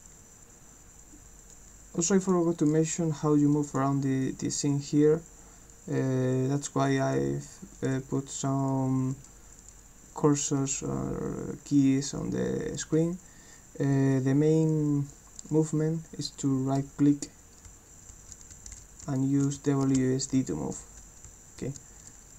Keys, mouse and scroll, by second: 1.5 click, 4.3 click, 16.8-22.3 right drag, 17.5-22.3 typing.